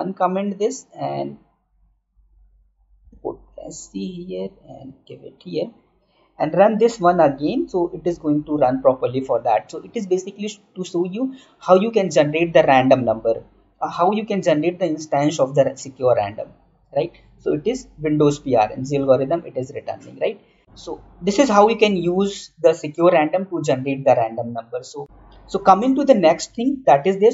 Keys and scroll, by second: 4.8 ctrl+/, 25.0 alt+Tab, 26.6 Right.